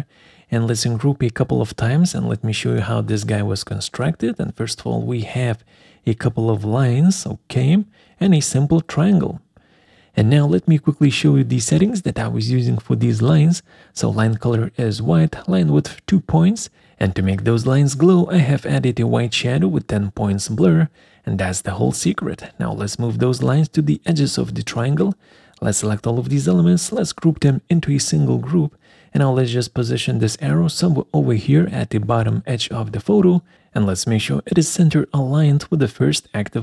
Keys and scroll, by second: 11.9 alt+4, 23.0 ctrl+z, 26.3 ctrl+g.